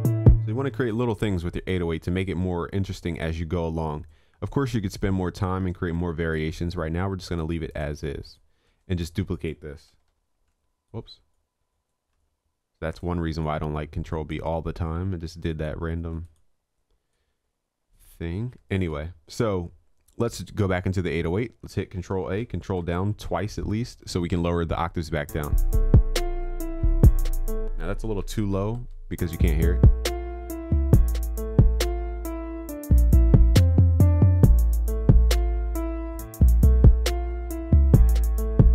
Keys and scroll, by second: 9.9 ctrl+b, 22.2 ctrl+a, 22.9 ctrl+Down, 28.5 ctrl+Up, 37.4 ctrl+s.